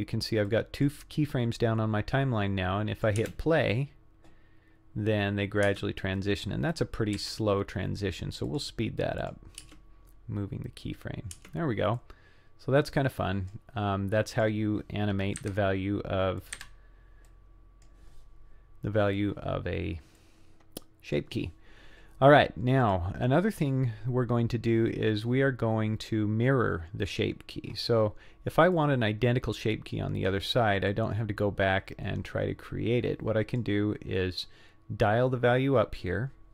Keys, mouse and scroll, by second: 0.5-0.9 drag, 2.1-3.1 drag, 3.2 space, 5.7 space, 6.7 click, 7.1 g, 9.3 click, 9.6 space, 11.4 space, 12.0-13.5 drag, 14.3 click, 15.4 Delete, 16.4 click, 16.6 Delete, 17.3 click, 20.2-21.2 drag, 22.9 click, 28.8-30.0 drag, 30.9-33.6 drag.